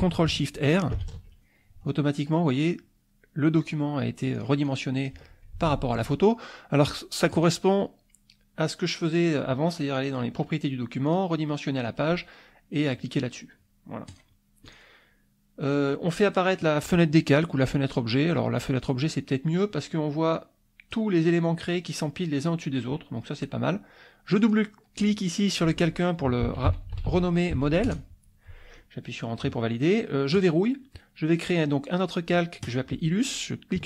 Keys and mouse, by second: 0.9 ctrl+shift+r, 4.3 click, 5.6 ctrl+z, 7.3 click, 8.6 click, 11.1 click, 14.1 click, 14.7 click, 16.5 click, 17.9 click, 18.7 click, 20.3 click, 24.3 click, 26.2-28.0 typing, 30.4 click, 32.7 click.